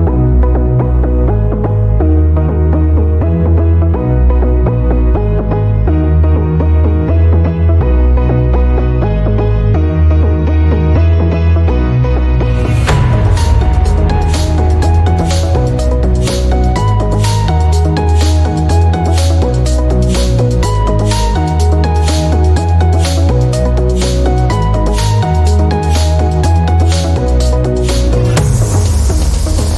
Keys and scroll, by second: 7.1 ctrl+alt+d.